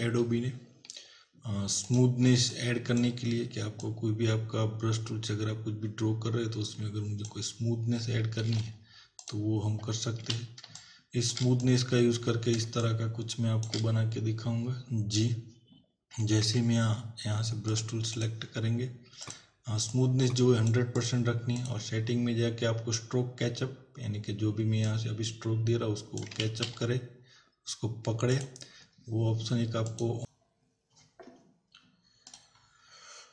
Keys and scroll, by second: 8.5 ctrl+w, 10.2 z, 10.7 space, 16.5 b, 26.5 ctrl+z.